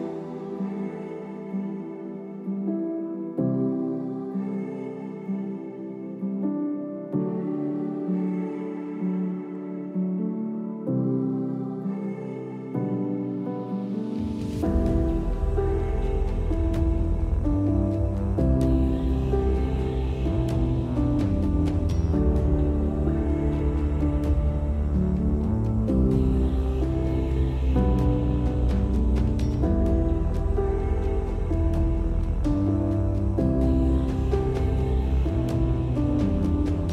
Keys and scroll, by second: 0.8 space, 5.1 Escape, 8.5-9.7 typing, 12.5 space, 16.4 space, 24.7-25.9 typing, 29.4 space, 31.3 space.